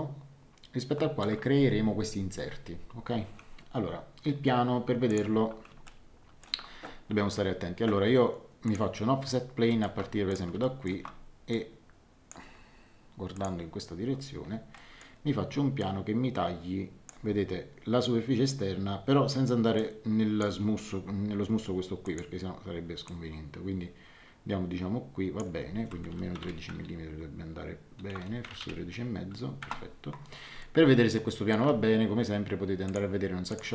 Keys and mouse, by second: 5.0 click, 5.8 shift+middle click, 8.6 click, 9.6 shift+middle click, 10.3 click, 10.6 shift+middle click, 11.5 click, 13.3 click, 14.7 middle click, 15.8 click, 19.7 click, 22.0 click, 23.0 click, 26.0 KP_Subtract, 26.3 KP_1, 26.4 KP_3, 28.4 KP_Decimal, 28.6 KP_5, 29.6 Return, 29.6 KP_Enter, 30.6 middle click, 32.8 click.